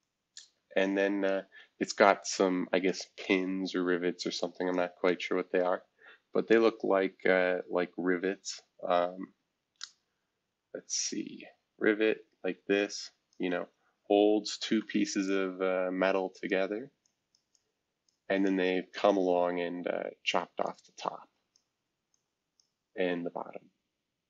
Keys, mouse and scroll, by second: 0.0-1.3 drag, 2.8-4.4 drag, 4.7 click, 8.5-13.3 drag, 15.2-16.5 shift+drag, 17.0 shift+click, 17.5 shift+click, 18.4 shift+click, 20.6 ctrl+click, 22.1 ctrl+click.